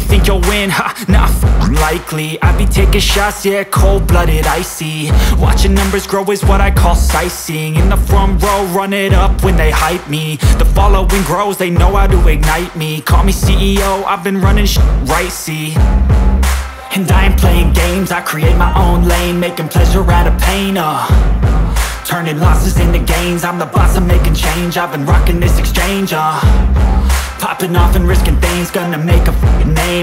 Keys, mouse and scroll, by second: 6.8-7.4 scroll up 8, 7.4 scroll, 8.4 click, 21.9 click, 26.1 click, 27.3 scroll.